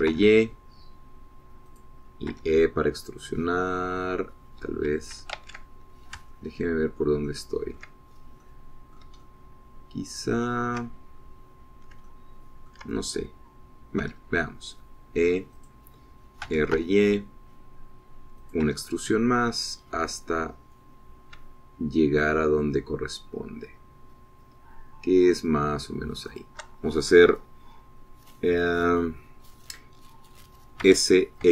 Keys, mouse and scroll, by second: 0.0 click, 0.9 r, 1.3 y, 2.9 click, 3.4 e, 5.7 Escape, 6.5 ctrl+z, 7.5 ctrl+click, 8.4 ctrl+click, 9.6 click, 10.4-12.1 shift+drag, 12.6 click, 13.2 ctrl+click, 15.2 e, 16.7 click, 17.6 r, 17.9 y, 19.6 click, 19.8 e, 27.5 shift+click.